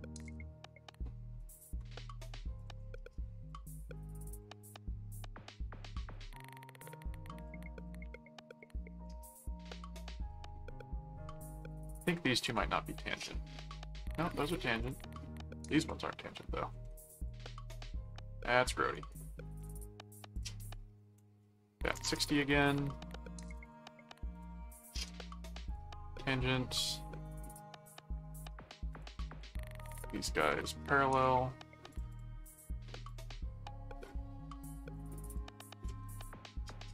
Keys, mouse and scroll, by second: 1.4 click, 2.6 ctrl+click, 3.5 ctrl+click, 4.3 ctrl+click, 6.1 ctrl+click, 6.9 alt+q, 7.4 click, 8.5 ctrl+click, 10.2 alt+click, 11.6 ctrl+click, 12.3 ctrl+click, 14.0 click, 14.8 ctrl+click, 15.6 ctrl+alt+click, 16.7 alt+a, 17.1 alt+click, 18.9 right click, 19.5 click, 20.3 click, 23.5 ctrl+click, 24.3 ctrl+alt+click, 25.1 alt+a, 25.6 click, 27.4 click, 28.9 click, 30.4 ctrl+click, 31.9 click, 33.0 click, 34.0 click, 35.2 click, 35.8 ctrl+Tab.